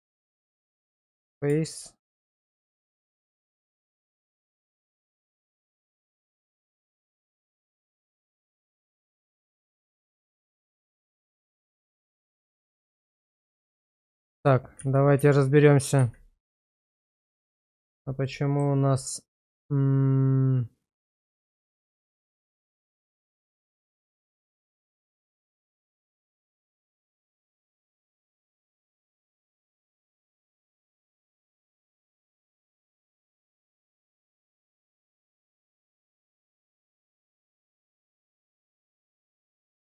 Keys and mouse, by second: 1.5 Tab, 2.2 shift+z, 2.8 middle click, 3.8 shift+middle drag, 4.9 /, 6.3-6.8 middle drag, 7.2 shift+middle drag, 7.5 middle click, 8.1 shift+middle drag, 10.0 Tab, 11.3 Tab, 13.0 middle click, 14.1 ctrl+z, 14.3 ctrl+z, 14.8 ctrl+z, 15.2 ctrl+z, 16.0 ctrl+z, 17.1 /, 18.3 shift+middle click, 23.6-25.2 middle drag, 25.9 /, 27.1 shift+middle click, 28.7 /, 29.5 ctrl+z, 29.8 ctrl+z, 30.1 ctrl+z, 30.4 ctrl+z, 30.9 ctrl+z, 31.4 ctrl+z, 32.0 ctrl+z, 32.5 ctrl+z, 33.5 ctrl+z, 35.0 click, 36.1 /, 37.3 shift+middle click, 38.2 Tab, 38.8-39.2 middle drag, 39.6 shift+middle click.